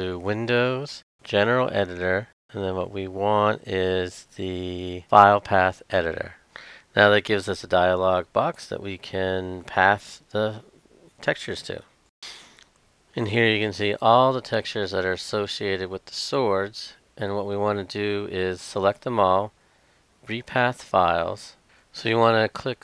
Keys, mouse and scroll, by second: 12.6-14.0 scroll down 1, 15.0-16.5 drag, 21.6 Left, 22.3-22.8 drag.